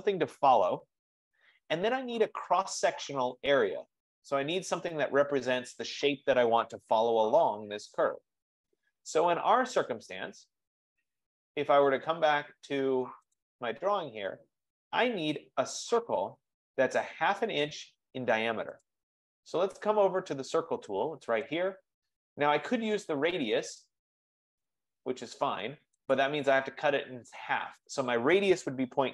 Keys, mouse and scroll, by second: 3.5-8.5 drag, 13.6-18.5 drag, 21.9 click, 26.3 click.